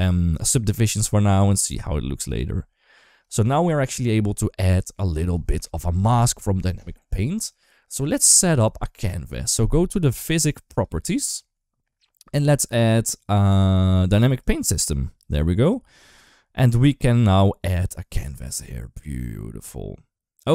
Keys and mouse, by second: 3.2 shift+middle click, 10.5 click, 14.2 click, 15.5-16.7 drag.